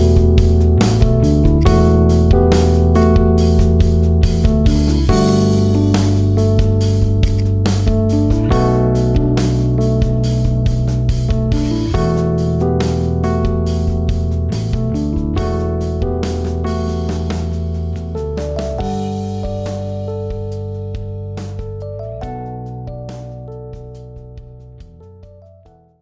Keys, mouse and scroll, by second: 0.0-1.5 middle drag, 1.5 click, 2.8 click, 5.2-6.8 drag, 7.2 click.